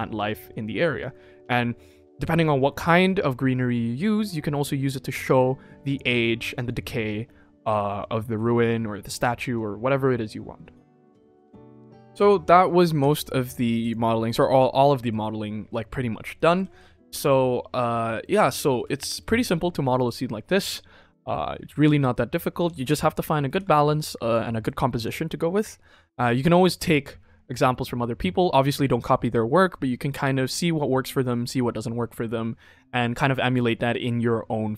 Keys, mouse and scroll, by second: 11.5 click, 13.8 click, 14.9 middle click, 15.7-16.3 scroll down 2, 16.3 middle drag, 16.6 ctrl+s, 16.9 shift+middle drag, 17.5 scroll down 1, 17.7-18.1 middle drag, 17.7 scroll up 1, 18.6 ctrl+s, 18.8 shift+middle drag, 19.4-19.8 middle drag, 21.0 middle click, 22.3 middle drag, 22.7 ctrl+s, 22.8 shift+middle drag, 23.2 middle click, 23.6 ctrl+s, 23.6 scroll up 2, 24.3 shift+middle drag, 25.0 ctrl+s.